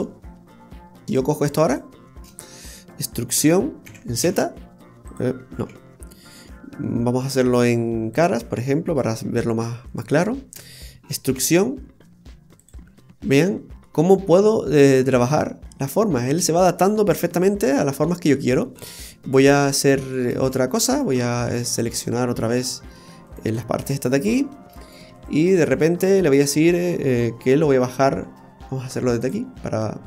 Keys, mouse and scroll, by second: 0.3-1.0 scroll up 1, 1.0 middle click, 1.0 scroll up 1, 1.0 Tab, 1.1 right click, 1.5 alt+shift+right click, 2.2 alt+shift+right click, 5.6 ctrl+z, 8.1 click, 8.9 right click, 9.9 alt+shift+right click, 10.1 alt+shift+right click, 11.3 e, 13.5 Tab, 13.9 middle click, 16.8 middle click, 17.7-18.1 scroll down 2, 18.1 middle click, 18.8 right click, 20.2 right click, 20.4 alt+shift+right click, 20.4 alt+shift+right click, 20.9 right click, 22.5 Tab, 23.3 right click, 23.8 alt+shift+right click, 24.4 alt+shift+right click, 24.8 right click, 25.2 alt+shift+right click, 25.3 right click, 26.7 middle click, 29.2 click.